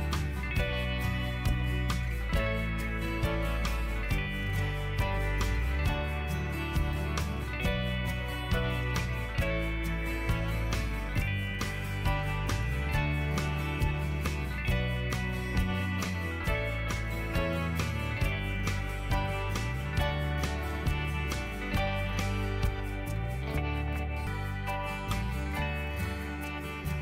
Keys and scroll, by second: 0.4 ctrl+t, 3.0 Return, 11.1-13.1 typing, 16.5 ctrl+t, 17.8 Return, 19.7 ctrl+g, 20.3 ctrl+l, 21.6 ctrl+l, 25.3 ctrl+l.